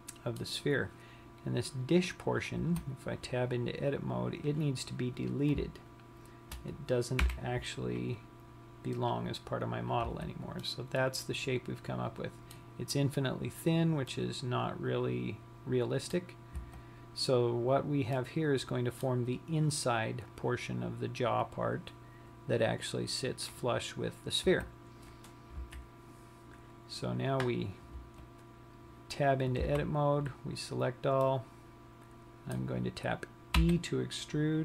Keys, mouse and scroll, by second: 0.3 middle click, 3.0 Tab, 4.7 click, 5.6 click, 6.3 shift+click, 7.6 Delete, 10.4 Tab, 11.0 middle click, 14.5 middle click, 17.0 Tab, 18.5 middle click, 24.9 Tab, 26.1 KP_3, 28.6 Tab, 30.4 a, 31.8 middle click, 34.0 e.